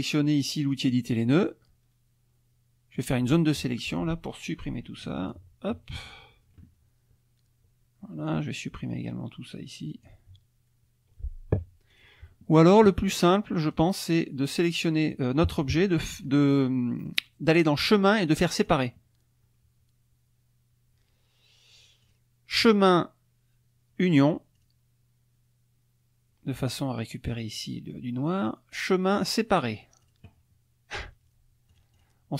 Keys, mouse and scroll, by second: 0.7 click, 3.0-5.5 drag, 5.6 Delete, 8.3-10.2 drag, 10.1 Delete, 11.9 click, 13.7 click, 14.7 click, 17.0 click, 18.6 click, 22.1 click, 24.5 click, 28.8 click, 30.0 click, 31.7 click.